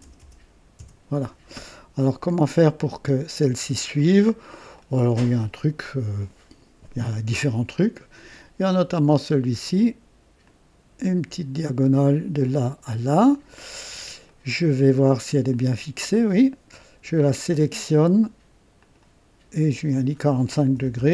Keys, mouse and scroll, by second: 0.0-1.8 typing, 2.8-4.2 drag, 4.3-4.6 scroll up 1, 4.8 right click, 8.1 click, 10.4 click, 12.4 click, 14.3 right click, 15.5-17.0 drag, 17.8 click, 18.8 click, 19.9 click, 20.8 KP_4, 21.0 KP_5.